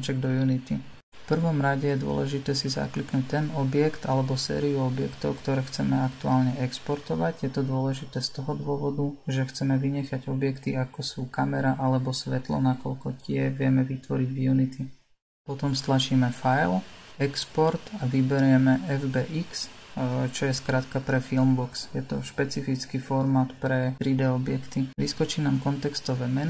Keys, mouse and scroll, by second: 0.6 click, 16.9-20.1 drag.